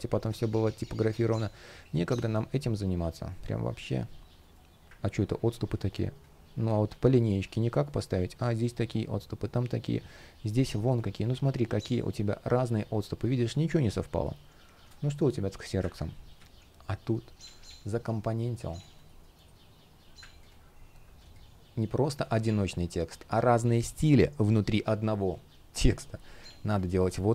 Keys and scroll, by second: 3.0 shift+o, 4.1 shift+o, 6.8 shift+o, 7.5 shift+o, 16.0 super+z, 25.9 shift+p.